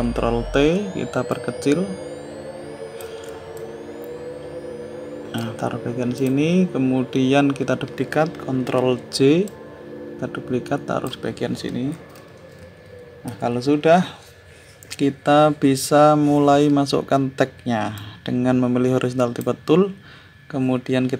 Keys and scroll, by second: 0.5 ctrl+t.